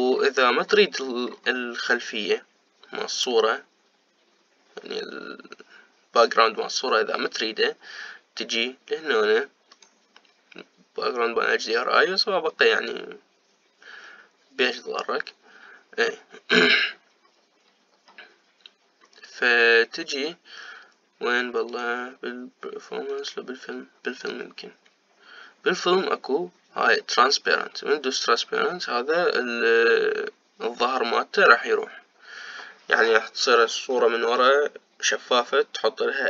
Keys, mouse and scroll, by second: 3.9-4.4 scroll up 1, 10.9 click, 17.5-18.4 scroll down 1, 18.4-20.3 scroll down 4, 20.3-21.0 scroll up 1, 21.0-22.8 scroll down 2, 22.8-30.4 drag.